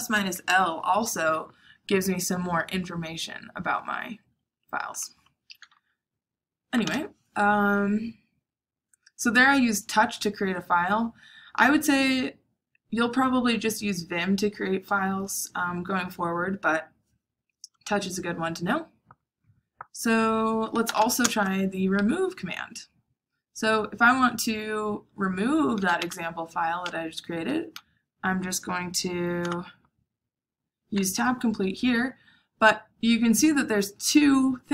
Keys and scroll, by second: 6.4-7.3 typing, 20.6-21.4 typing, 25.4-26.4 typing, 29.4 Tab.